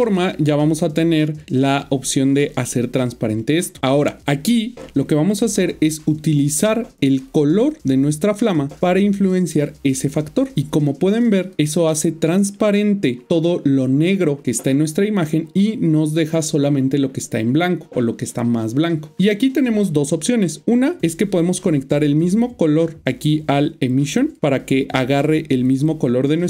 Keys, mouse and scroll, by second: 0.7 click, 4.9-6.1 scroll up 1, 6.1 click, 11.9 middle click, 21.5 click.